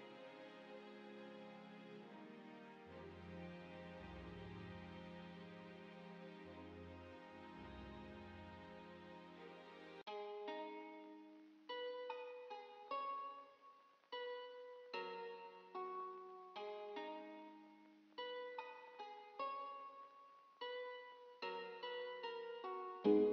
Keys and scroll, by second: 5.9 z, 21.5-22.3 typing.